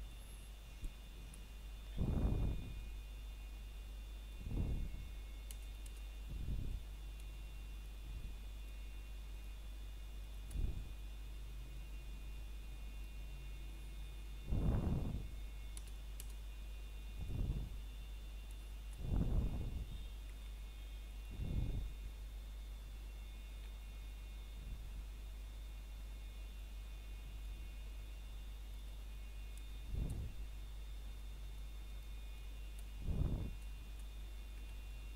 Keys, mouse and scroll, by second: 0.0 shift+click, 2.0 middle click, 2.8 click, 3.9 scroll down 1, 4.1 middle click, 4.4 scroll up 1, 4.7 middle click, 7.2-7.7 scroll down 1, 7.8 shift+middle click, 9.4 ctrl+Tab, 10.2 click, 12.8 c, 13.4 click, 19.7 shift+middle click, 20.3-21.2 scroll down 1, 21.2 click, 21.9 right click, 22.3 scroll down 1, 22.5 shift+middle click, 23.0 scroll up 1, 23.7 scroll down 1, 23.8 shift+middle click, 24.7 c, 25.0 click, 27.0 right click, 27.9 c, 28.5 click, 30.7 right click, 31.3 shift+middle click, 31.8 scroll up 1, 33.0 c, 33.3 click.